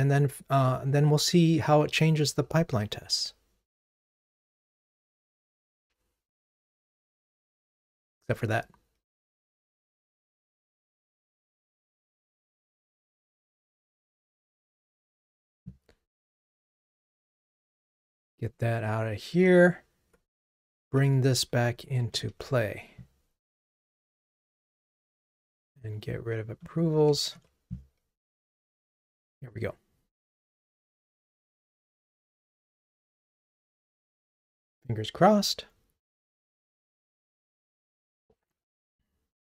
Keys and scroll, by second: 2.7 ctrl+r, 18.5 super+BackSpace, 20.8 super+/, 27.3 super+BackSpace, 29.1 ctrl+r.